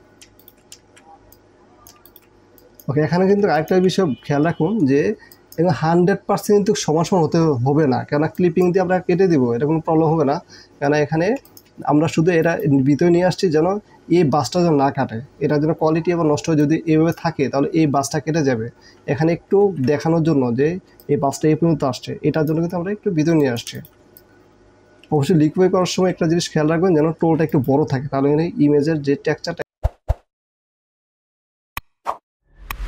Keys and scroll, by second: 3.5 ctrl+space, 8.3 space, 11.5 space, 12.3 alt+space, 19.7 ctrl+alt+z, 23.5 space, 25.4 ctrl+alt+z, 25.9 ctrl+alt+z, 26.0 ctrl+alt+z.